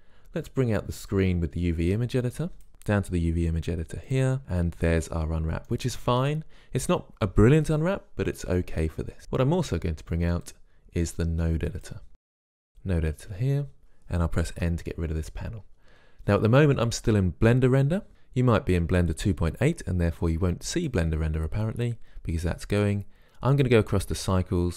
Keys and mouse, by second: 1.3-3.1 drag, 10.7-12.8 drag, 14.8 n, 21.0-22.9 drag.